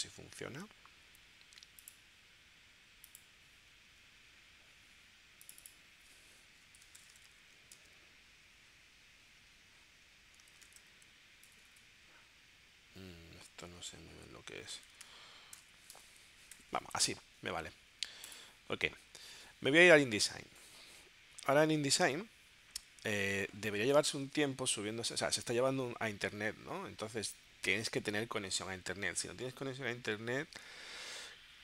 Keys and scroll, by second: 6.5-7.8 typing, 10.3-11.6 typing, 14.7-16.1 typing, 16.5 Return, 20.1 super+Tab.